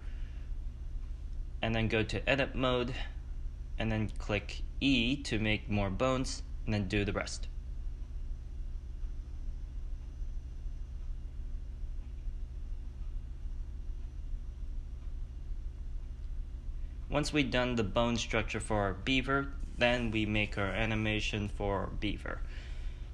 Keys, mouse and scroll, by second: 2.9 click, 3.3-5.0 drag, 5.0 e, 6.8 e, 8.0 e, 9.8 click, 10.3-16.3 typing, 10.9 click, 12.0 click, 13.5 click, 14.2 ctrl+z, 14.3 click, 15.1 click, 15.9 right click, 16.6-23.1 drag.